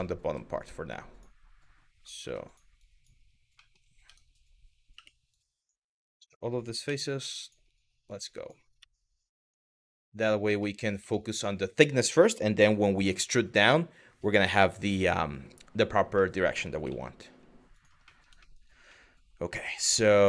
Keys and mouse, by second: 0.2 click, 0.6 drag, 1.8 3, 2.4 click, 3.3 middle click, 3.7 Tab, 4.6 3, 5.0 click, 6.5 x, 7.8 click, 8.4 x, 9.6 middle click, 10.3 middle click, 10.7 middle click, 15.9 middle click, 16.5 z, 17.7 middle click, 18.0 middle click, 18.6-20.1 middle drag.